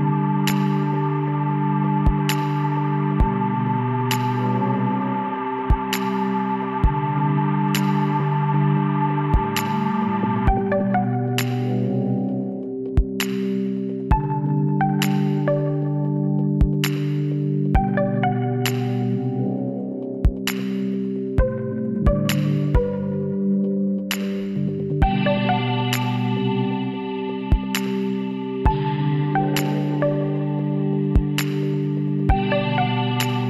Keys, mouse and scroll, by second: 2.4-7.4 middle drag, 7.4-9.3 drag, 8.0-11.3 right drag, 11.3 ctrl+e, 15.8-18.6 right drag, 17.8 x, 20.5-22.5 middle drag, 22.5 Tab, 25.4 Tab, 28.8 KP_1, 29.7 z, 32.9-33.4 middle drag.